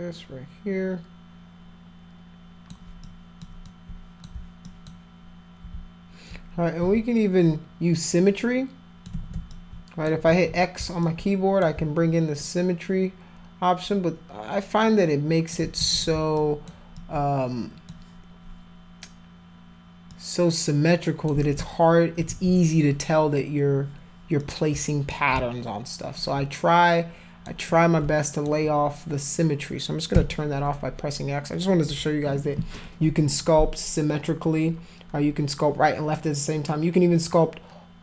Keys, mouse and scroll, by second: 3.1 alt+click, 3.7 alt+click, 4.7 alt+click, 6.8 x, 8.1 click, 9.1 ctrl+z, 9.5 alt+click, 10.3 ctrl+z, 11.0 alt+click, 12.4-15.5 alt+drag, 15.8 ctrl+z, 16.4 alt+click, 17.0 alt+click, 20.1-21.3 drag, 21.3 ctrl+z, 22.3 ctrl+z, 23.1 click, 24.4 shift+click, 26.2-27.5 alt+drag, 27.7 click, 30.1 x.